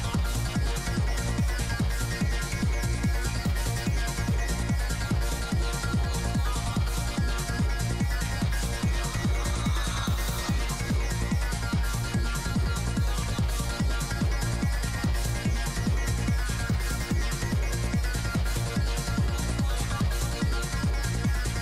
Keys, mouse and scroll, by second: 0.0-1.5 typing, 1.0-2.4 drag, 2.6 f, 2.7-3.8 drag, 3.3 middle click, 4.9 f, 5.2-9.0 drag, 5.8 f, 8.4-10.1 middle drag, 10.1 f, 10.3 f, 10.7-12.6 drag, 11.5 f, 13.0 f, 13.5 f, 13.6-15.0 drag, 13.6 middle click, 14.0 f, 15.4 click, 15.4 middle click, 16.0 g, 16.0 f, 16.6-19.4 drag, 16.6 middle click, 16.9 f, 17.5-21.6 middle drag, 17.6 right click, 21.3-21.6 drag.